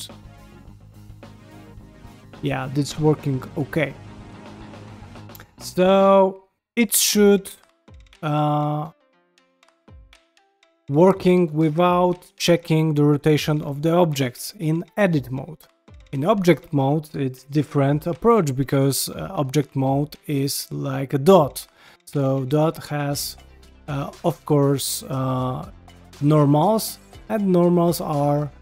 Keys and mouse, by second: 0.4 middle click, 1.4 g, 2.2 middle click, 2.6 g, 3.3 middle click, 3.6 g, 4.3 middle click, 5.7 g, 7.4 g, 8.9 ctrl+z, 9.1 ctrl+z, 9.3 ctrl+z, 11.5 ctrl+Tab, 13.3 g, 16.6 ctrl+middle click, 16.9 shift+middle click, 18.1 r, 18.6 g, 19.3 r, 19.8 g, 22.0 click, 24.1 g, 26.9 g, 28.1 middle click.